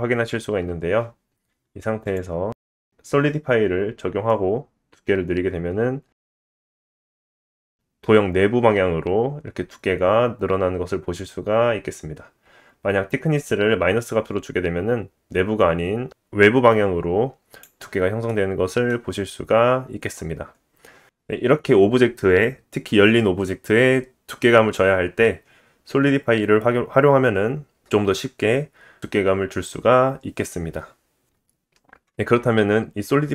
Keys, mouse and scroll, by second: 0.0 scroll down 2, 2.0 click, 4.4 middle click, 5.0 scroll up 2, 6.1-19.3 drag, 19.3 scroll down 1, 19.3 middle click, 19.5-33.3 drag, 20.2-21.0 scroll down 1, 26.5 middle click, 27.4-28.0 scroll up 1, 28.0-29.4 scroll up 1.